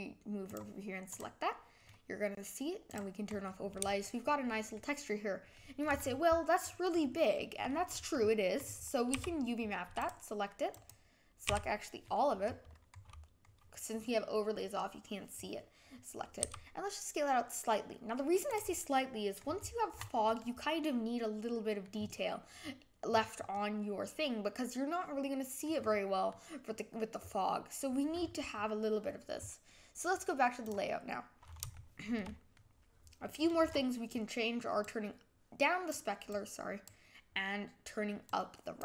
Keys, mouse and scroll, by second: 0.5 click, 2.8 click, 3.4-5.9 middle drag, 7.3-9.1 middle drag, 20.4-21.9 middle drag, 23.5-25.7 middle drag, 26.3 middle click, 30.7 click, 31.7-34.9 shift+middle drag, 34.9-38.8 drag.